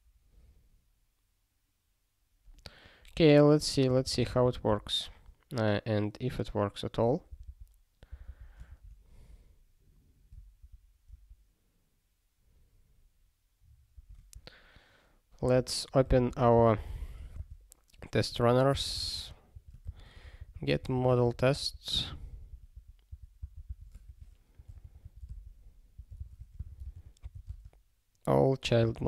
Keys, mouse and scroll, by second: 4.4 ctrl+n, 7.3 super+b, 8.3 super+b, 8.7 alt+<, 10.6 alt+>, 11.1 alt+<, 13.9 alt+>, 15.4 super+b, 16.0 ctrl+g.